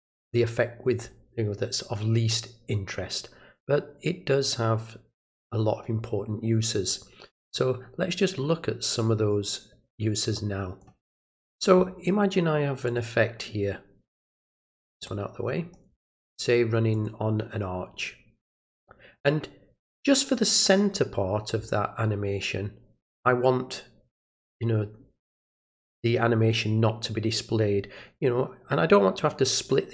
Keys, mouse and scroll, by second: 6.9-10.8 drag, 12.9 click, 15.1-15.7 drag, 16.9 click.